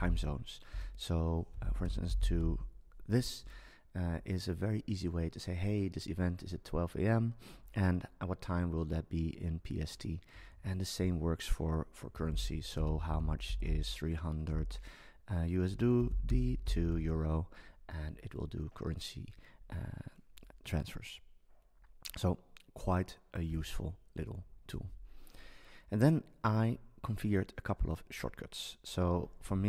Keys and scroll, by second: 1.8-3.0 typing, 10.5 super+a, 14.5 BackSpace.